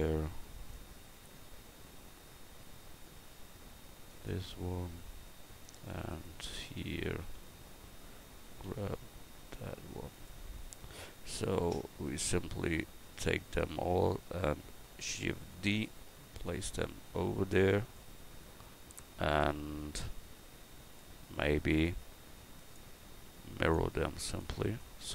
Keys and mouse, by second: 0.2 Tab, 2.7 g, 4.6 Tab, 6.7 Tab, 8.7 g, 10.5 Tab, 15.5 shift+d, 16.6-25.1 drag.